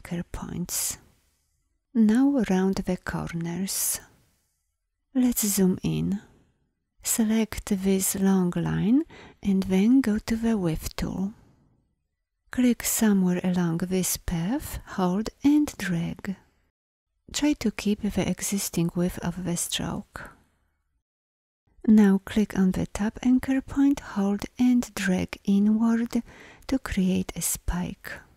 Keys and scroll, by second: 5.0 alt+scroll, 10.0 shift+w.